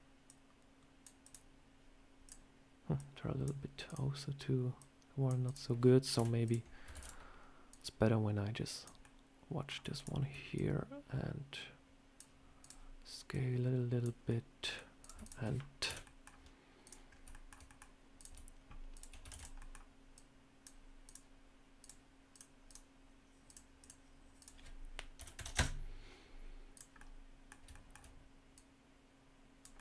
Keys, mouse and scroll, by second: 0.1 click, 1.1 click, 2.1 click, 2.8 click, 3.7 click, 4.6 click, 5.3 click, 6.0 Delete, 6.3 click, 6.8 shift+d, 7.6 click, 8.9 middle click, 9.8 shift+click, 10.4 click, 12.5 click, 12.6 shift+click, 13.2 click, 14.1 middle click, 14.9 click, 15.1 shift+click, 15.1 shift+click, 15.8 Delete, 15.9 middle click, 16.7 click, 16.9 scroll down 2, 17.2 shift+middle click, 17.5 middle click, 18.0 click, 18.8 shift+click, 19.2 shift+d, 19.4 middle click, 20.0 click, 20.9 click, 20.9 shift+click, 21.7 click, 21.7 shift+click, 22.2 click, 22.5 click, 23.7 click, 24.2 click, 26.6 click, 26.8 middle click, 27.6 shift+middle click, 28.4 click, 29.6 middle click.